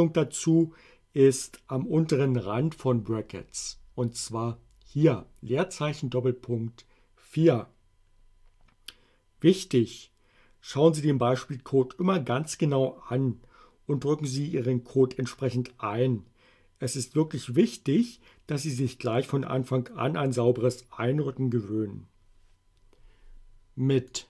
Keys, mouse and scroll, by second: 24.1 click.